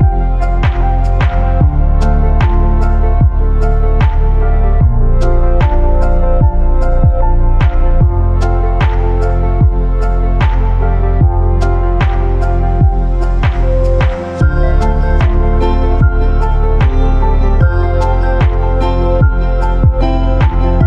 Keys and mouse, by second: 1.1 click, 20.7-20.8 middle drag.